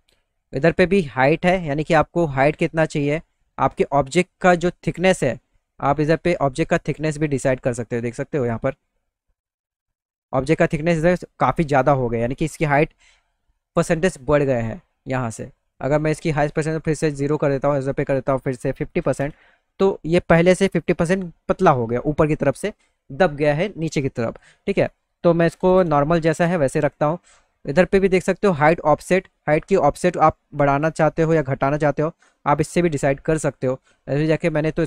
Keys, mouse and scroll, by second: 2.2-6.3 drag, 9.1 alt+middle click, 16.5 right click, 18.0 click, 29.6-32.3 drag, 33.9 click.